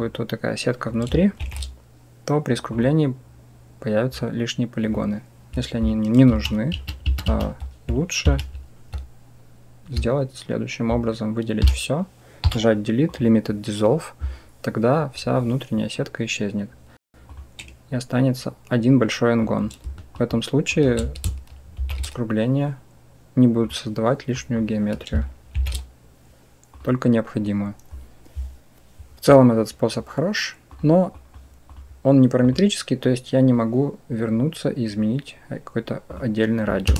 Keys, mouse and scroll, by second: 1.3 ctrl+shift+b, 6.2 ctrl+a, 6.6 ctrl+a, 6.9 ctrl+a, 7.2 ctrl+a, 8.2 ctrl+z, 11.5 a, 12.3 Delete, 19.3 click, 20.1 shift+click, 21.6 ctrl+shift+b, 24.2 click, 25.4 ctrl+shift+b, 30.6-31.2 drag, 32.3 click, 36.7 Tab.